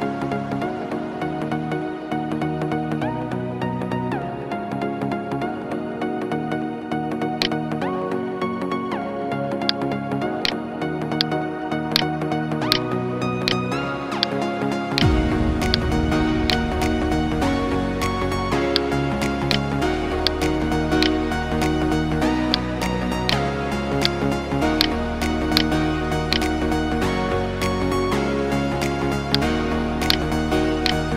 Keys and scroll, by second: 16.6 alt+BackSpace, 21.7 ctrl+d, 22.3 space, 25.4 space, 27.6 ctrl+z.